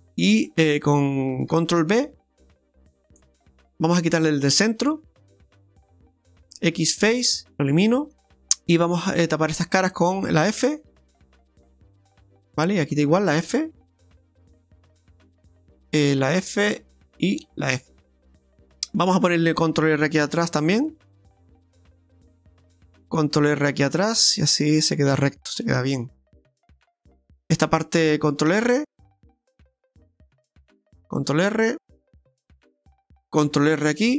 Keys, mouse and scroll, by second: 1.8 ctrl+b, 5.3 middle click, 6.6 x, 7.7 middle click, 8.2 shift+middle click, 8.2 scroll up 3, 8.3 shift+middle click, 9.5 right click, 10.5 f, 10.9 f, 12.1 f, 13.2 right click, 13.5 f, 13.8 f, 14.3 middle click, 15.7 right click, 16.1 f, 16.2 f, 17.2 right click, 17.5 f, 17.6 f, 18.2 scroll down 1, 18.4 middle click, 20.4 ctrl+r, 22.3 middle click, 23.2 ctrl+r, 25.6 middle click, 28.6 ctrl+r, 31.1 ctrl+r, 33.4 ctrl+r.